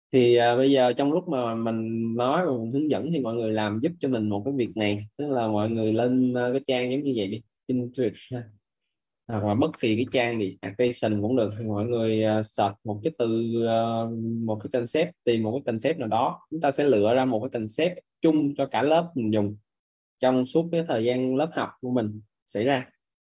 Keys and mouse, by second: 6.1 right click, 11.0 click.